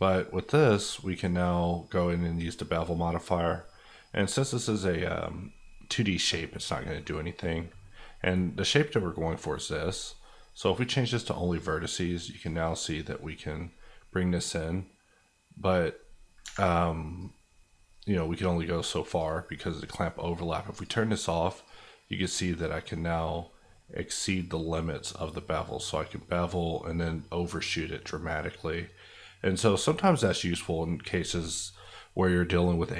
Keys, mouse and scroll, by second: 3.5 middle click, 11.0 click, 16.4 Escape, 17.2 click.